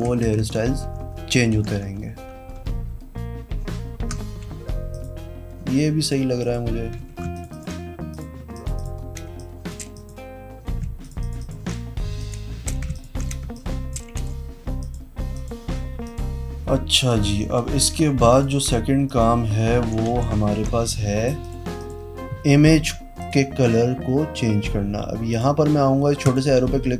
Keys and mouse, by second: 0.0-1.7 typing, 4.8 click, 5.9 click, 6.3 click, 6.9 z, 7.4 alt+click, 8.1 click, 8.7 click, 9.2 space, 9.3 click, 9.9 click, 11.0 alt+click, 11.1 alt+click, 11.4 alt+click, 12.2 click, 12.4 space, 12.9 alt+click, 13.4 space, 13.5 click, 14.1 v, 14.7 click, 15.3 click, 16.0 click, 17.0 click, 17.9 z, 18.3 alt+click, 19.0 click, 19.7 v, 20.0 z, 21.4 click, 23.1 click, 25.2 click, 26.2 click.